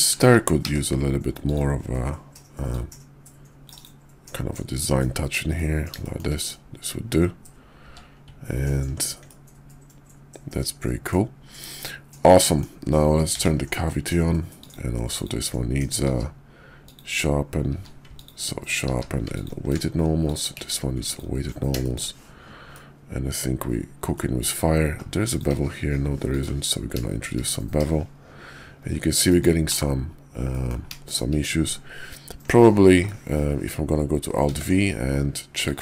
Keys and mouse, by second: 0.6 d, 2.7-4.3 drag, 5.0-5.6 middle drag, 5.9 shift+middle drag, 6.3 KP_5, 7.7 q, 9.2-11.1 middle drag, 11.8-12.6 middle drag, 13.3 alt+v, 14.9 click, 16.0 q, 17.7 q, 18.9 q, 20.5 q, 21.8 shift+click, 22.6-24.1 drag, 25.2 click, 25.5 q, 29.7 /, 30.4 click, 31.0 shift+drag, 32.9-33.6 middle drag, 34.4 alt+v.